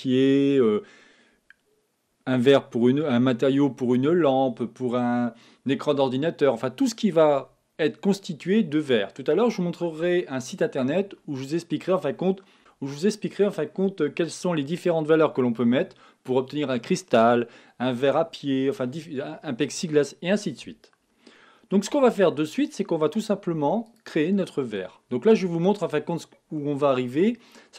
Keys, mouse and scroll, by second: 22.0 x, 23.5 x, 24.9-27.7 middle drag.